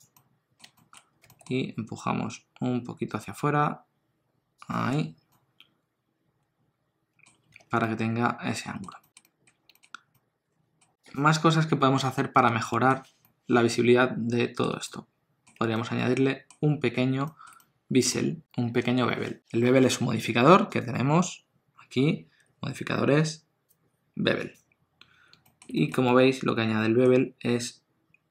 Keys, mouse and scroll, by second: 0.1 middle click, 0.7 shift+middle click, 2.1 g, 4.8 Tab, 5.3 middle click, 7.3 scroll down 1, 7.6 alt+a, 7.8 middle click, 9.0 shift+middle click, 9.2 middle click, 9.7 shift+middle click, 10.1 middle click, 11.0 click, 12.7 shift+middle click, 13.2 middle click, 14.8 ctrl+middle click, 15.8 middle click, 17.2 shift+middle click, 17.6 middle click, 20.8 click, 25.4 shift+middle click, 25.7 middle click, 26.1 ctrl+middle click.